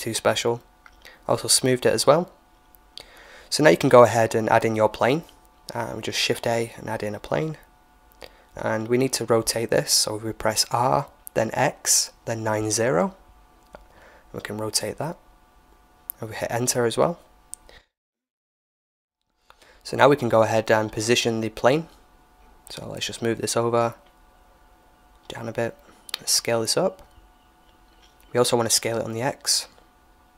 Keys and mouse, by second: 0.4-1.4 drag, 1.3 t, 1.4 right click, 1.7 ctrl+j, 1.8-2.8 middle drag, 2.2 shift+a, 8.1-9.8 middle drag, 10.5-12.5 middle drag, 12.2 r, 17.6-19.7 middle drag, 19.7 KP_1, 22.1-25.5 drag, 26.6 s, 29.2 s.